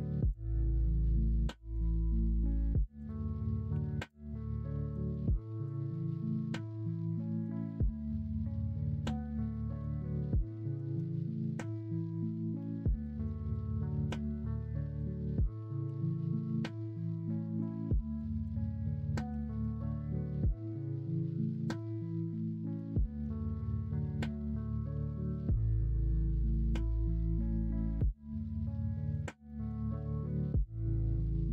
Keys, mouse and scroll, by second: 1.9 middle click, 3.7 3, 4.2 middle click, 6.2-7.5 middle drag, 8.1-9.8 middle drag, 10.2 KP_1, 10.8 alt+z, 11.6 alt+z, 12.6 middle click, 13.9-14.9 middle drag, 15.8 e, 18.4 s, 21.7-22.7 middle drag, 22.7-23.2 scroll down 1, 23.8-24.2 scroll up 1, 24.2 scroll down 1, 24.7-25.3 scroll up 1, 25.3 middle click, 26.0 ctrl+r, 29.5 middle click, 31.3 ctrl+r.